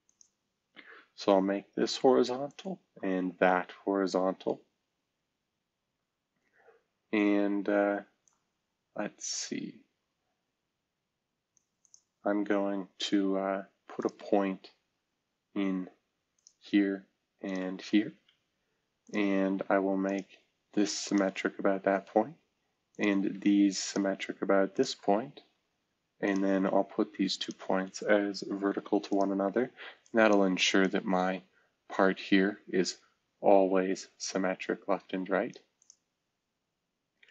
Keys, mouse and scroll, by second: 1.1 typing, 2.8 typing, 4.7-5.3 scroll down 1, 5.4-6.9 scroll up 1, 18.2 Escape, 19.0 click, 20.0 ctrl+click, 21.0 ctrl+click, 21.8 s, 22.9 click, 23.8 ctrl+click, 24.7 ctrl+click, 24.9-25.4 typing, 28.6 typing, 29.1 click, 29.5 click, 30.0 click, 30.8 click.